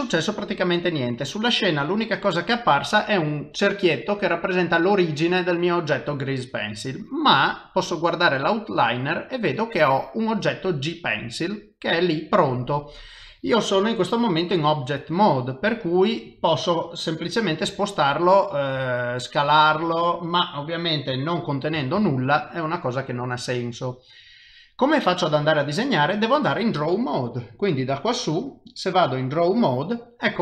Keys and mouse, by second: 18.8 g, 22.0 ctrl+z, 27.4 click.